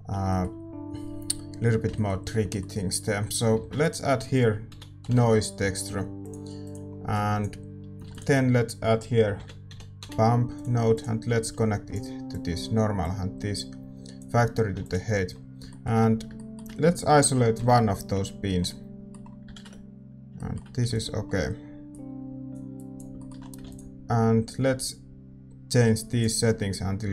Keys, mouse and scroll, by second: 15.3 ctrl+s, 15.3-27.1 middle drag, 17.5 KP_Divide.